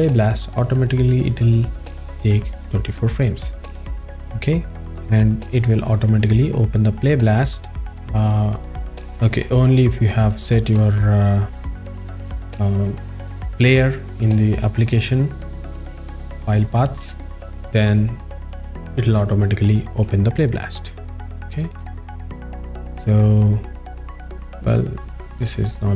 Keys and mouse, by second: 25.7 click.